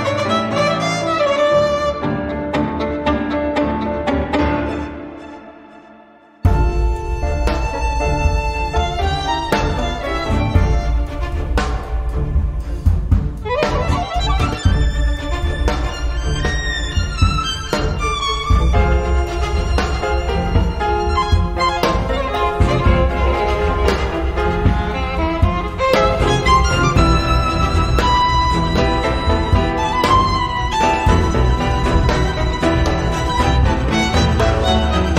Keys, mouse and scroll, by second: 0.1-2.0 drag, 2.1 click, 3.2 click, 4.2 click, 4.9 click, 6.4 click, 7.8 click, 9.2 click, 10.2 click, 11.5 3, 12.0-13.0 drag, 13.0 4, 13.4 0, 14.6 click, 15.9 click, 17.2 click, 18.3 5, 19.1 click, 20.6 click, 21.7 7, 22.6 click, 24.1 click, 25.5 click, 28.1 click, 29.1 click, 32.1 6, 33.2 click, 33.7 click, 34.3 6, 34.9 click.